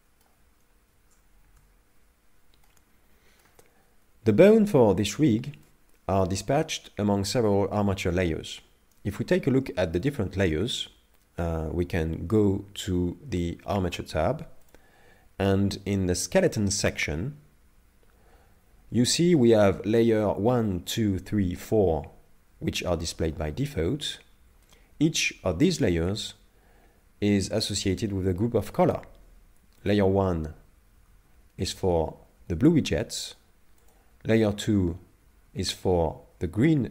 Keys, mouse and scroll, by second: 0.5-2.6 scroll down 1, 2.6 shift+middle click, 5.6 middle click, 14.7 click, 29.8 click, 31.1 click, 31.1 a, 33.8 click, 34.6 a, 35.1 a, 35.5 a.